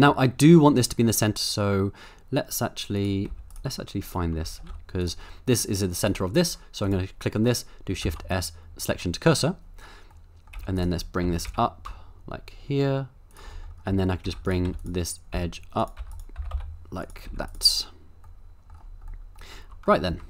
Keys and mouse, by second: 1.3 KP_7, 2.9 click, 3.3 z, 4.0 click, 4.6 shift+s, 6.0 click, 8.0 shift+s, 10.2-10.5 middle drag, 10.5 z, 11.0 middle click, 11.2 g, 11.5 z, 13.3 shift+click, 13.6 middle click, 13.9 Tab, 14.2-17.3 typing, 17.0 click, 18.3 middle click, 19.2 middle click, 20.1 Tab.